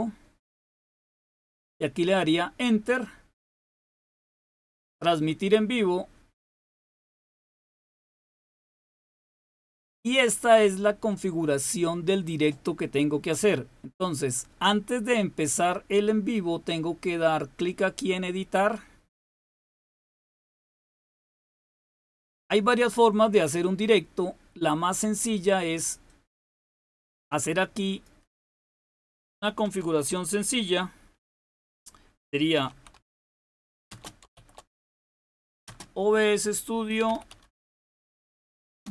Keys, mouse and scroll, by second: 3.4 click, 19.4 click, 20.1 click, 26.0-30.0 drag, 32.6-38.9 typing.